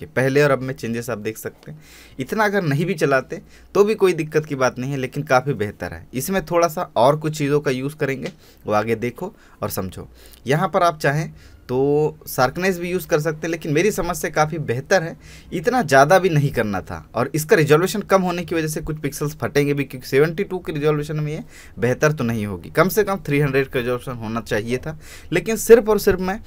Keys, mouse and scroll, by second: 0.1 click, 0.4-1.1 scroll up 1, 1.1-1.6 scroll down 1, 2.5 space, 2.8 alt+scroll down 1, 3.4 alt+click, 6.9 alt+space, 7.0-7.4 alt+scroll up 1, 7.4 alt+space, 8.4 space, 9.0 click, 9.3 space, 9.9 space, 10.5 space, 11.6 click, 17.4 space, 17.5 alt+scroll up 1, 18.3 click, 18.8 alt+scroll down 1, 19.4 alt+scroll up 1, 20.5 click, 21.1 alt+scroll up 1, 21.4 alt+scroll down 1, 22.3 click.